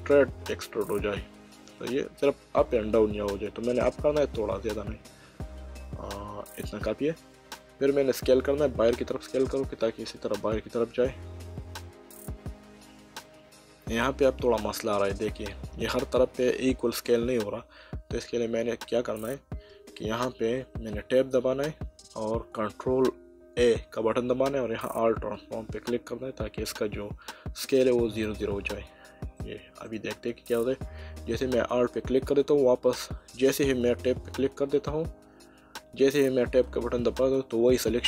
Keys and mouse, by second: 1.0 z, 6.5 click, 8.2 s, 18.3 Escape, 21.0 Tab, 23.6 ctrl+a, 28.2 click, 29.4 middle click, 37.5 Tab.